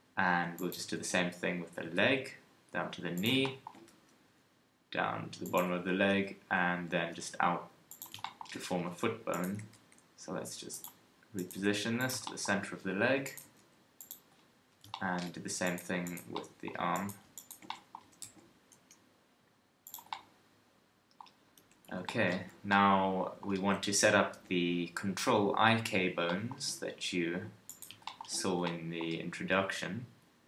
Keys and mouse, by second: 0.2 click, 0.9 shift+a, 1.8 g, 3.1 click, 3.9 e, 5.9 KP_3, 7.0 e, 9.6 g, 10.5-12.1 drag, 11.5 g, 13.4 g, 18.0 g, 21.6 KP_1, 22.4 a, 23.5 KP_3, 28.1-30.4 middle drag.